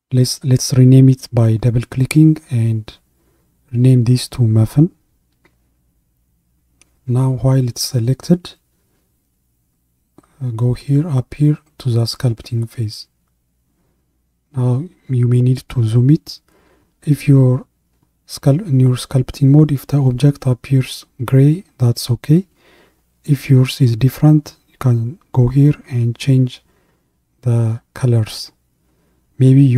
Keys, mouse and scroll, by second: 1.0 click, 1.2-4.4 drag, 11.2 click, 14.7-16.7 scroll up 16, 17.4-19.4 scroll up 3, 19.4-20.4 shift+middle drag, 20.4-21.8 scroll up 1, 24.8-29.7 drag.